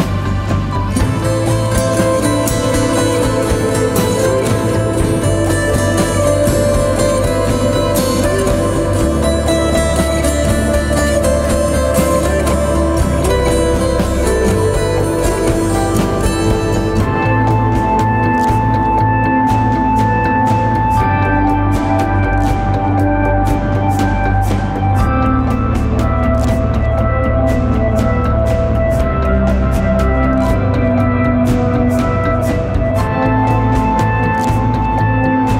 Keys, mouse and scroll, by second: 0.5 shift+click, 17.5 right click, 19.4 right click, 19.6 ctrl+t, 20.8 alt+shift+click, 24.1 Return.